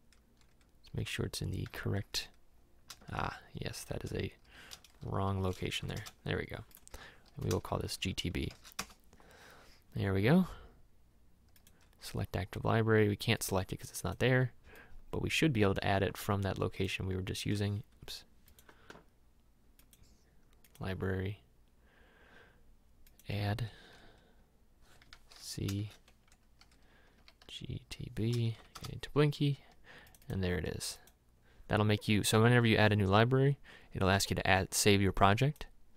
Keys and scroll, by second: 1.7 c, 2.9 shift+;, 4.1 \, 5.1 g, 5.8 Down, 5.9 Return, 7.6 shift+g, 7.9 shift+t, 8.6 shift+b, 8.8 Return, 18.0 Escape, 25.0 c, 25.8 shift+;, 26.3 \, 27.3 g, 28.6 Down, 28.8 Return.